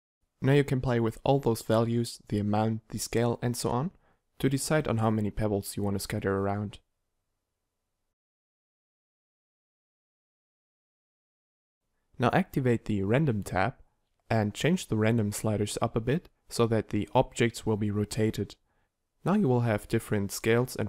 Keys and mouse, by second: 0.1 click, 1.8 middle click, 5.1 middle click, 16.7 middle click, 18.7 0.